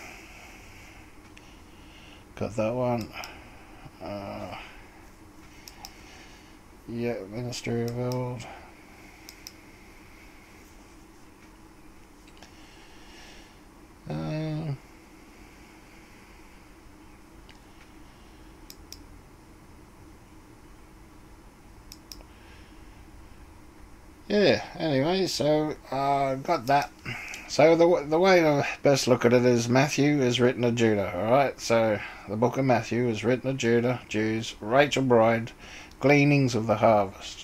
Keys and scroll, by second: 26.6-27.3 typing.